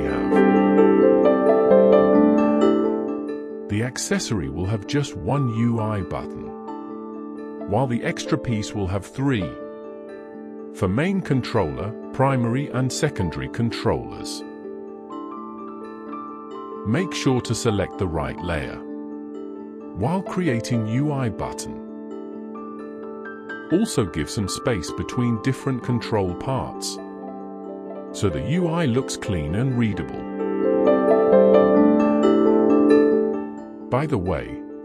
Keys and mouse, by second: 5.8 click, 7.5 click, 13.4 click, 16.3 click, 18.5 click, 20.3 click, 25.3 click, 26.3 click.